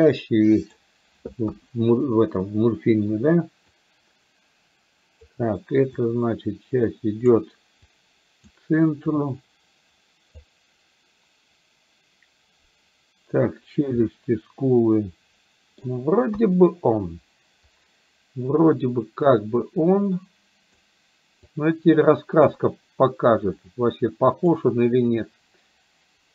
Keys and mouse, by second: 1.5 KP_1, 3.9-5.3 drag, 6.0-7.4 drag, 8.0 click, 9.2-10.5 drag, 14.2-15.9 middle drag, 16.3 KP_1, 19.7-20.8 drag, 21.5-22.7 drag, 23.7 click.